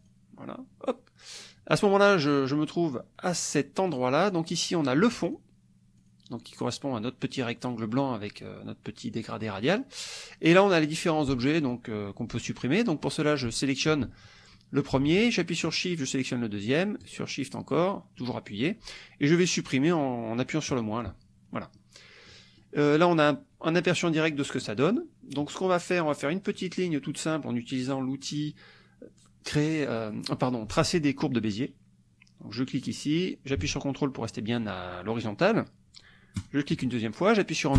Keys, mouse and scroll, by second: 3.9 click, 4.5 click, 5.2 click, 6.0 click, 10.5 click, 15.6 shift+click, 17.0 shift+click, 20.7 click, 22.3 click, 24.1-25.2 drag, 26.6 click, 32.8 click, 36.4 ctrl+click.